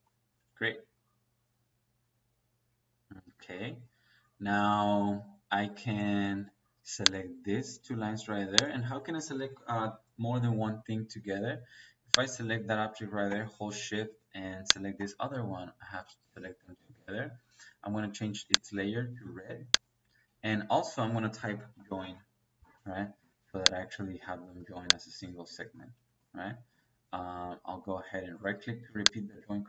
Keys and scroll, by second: 21.5-22.5 typing, 23.1 Escape, 24.5 Escape, 25.8 Escape, 27.6 Escape.